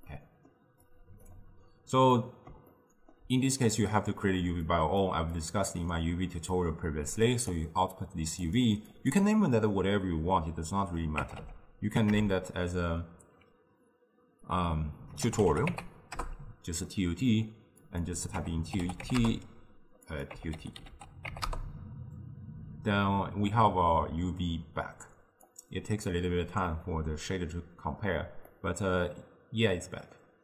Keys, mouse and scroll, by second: 0.1-0.9 middle drag, 0.9 click, 2.2-4.8 middle drag, 4.8 click, 5.4 click, 6.6-12.1 drag, 17.9-23.3 drag, 25.5 click, 28.5-30.4 middle drag.